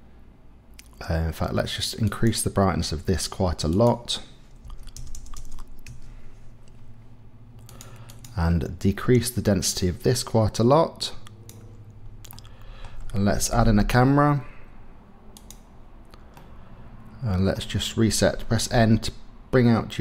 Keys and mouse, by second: 2.1 click, 3.7-5.9 drag, 5.1 KP_0, 7.7 click, 8.2-11.5 drag, 12.3 click, 13.7 shift+a, 16.3-16.7 drag, 16.7-17.5 middle drag, 18.7 n.